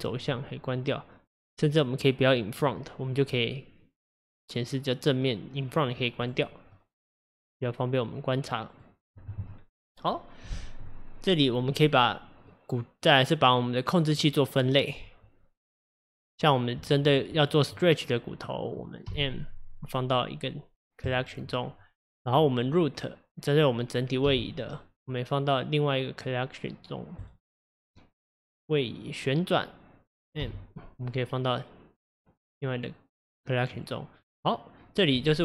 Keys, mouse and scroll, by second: 0.4-1.7 middle drag, 1.7 click, 2.7-5.8 middle drag, 5.8 click, 6.3 click, 6.8-9.9 middle drag, 12.6-16.9 middle drag, 16.9 shift+click, 19.1 m, 22.3 click, 22.7 click, 24.3 m, 27.9 click, 29.0 click, 30.4 m.